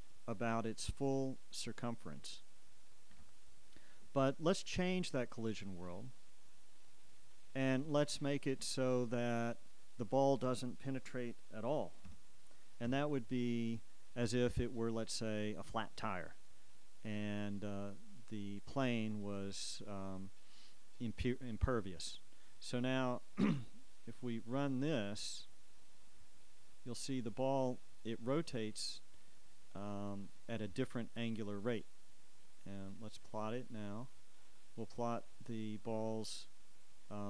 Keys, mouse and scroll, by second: 3.3 Escape, 6.0 click, 6.7 click, 7.4 click, 9.8 shift+click, 12.2 KP_0, 13.1 KP_Enter, 14.6 click, 22.7-26.0 drag, 27.4 Escape, 29.4-30.7 drag, 33.1 right click, 34.3 click, 35.4 click.